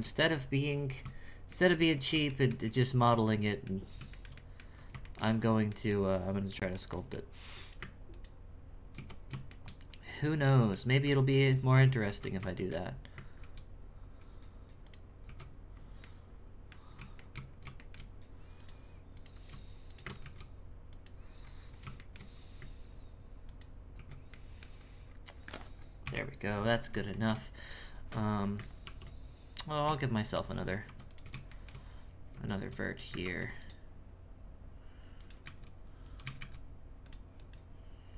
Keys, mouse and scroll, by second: 1.9-2.3 scroll up 2, 2.3 shift+middle click, 2.6 z, 3.1 middle click, 3.7-4.1 scroll down 1, 4.1 shift+middle click, 4.7 scroll up 1, 5.0 shift+middle click, 5.3 scroll up 3, 5.6 middle click, 6.0-6.5 scroll up 1, 6.5-7.5 shift+middle drag, 7.5 right click, 8.0 ctrl+right click, 8.9 ctrl+x, 9.4 shift+middle click, 10.1 right click, 10.4-11.4 middle drag, 11.4 ctrl+right click, 12.0 ctrl+x, 12.5 shift+middle click, 13.3 ctrl+z, 14.8 ctrl+right click, 15.2 ctrl+x, 15.7 scroll up 1, 16.0 middle click, 16.7-17.1 scroll down 2, 17.1 shift+middle click, 17.4-17.7 scroll down 1, 17.7 shift+middle click, 18.5 right click, 19.1 right click, 19.8 shift+right click, 20.2 ctrl+x, 20.9 right click, 21.4-21.9 scroll up 1, 21.9 shift+middle click, 22.3-23.4 scroll up 1, 23.4 ctrl+right click, 24.3 middle click, 24.7-25.7 scroll down 10, 25.7 scroll up 2, 26.0 KP_1, 26.6-27.1 scroll down 3, 27.1 shift+middle click, 27.5-28.8 scroll up 2, 28.8 ctrl+r, 30.1 shift+middle click, 30.5-30.8 scroll up 2, 30.8 1, 31.0 right click, 31.4 shift+middle click, 31.8-32.8 scroll up 2, 32.8-33.2 scroll down 2, 33.2 ctrl+r, 35.1 right click, 37.3 right click.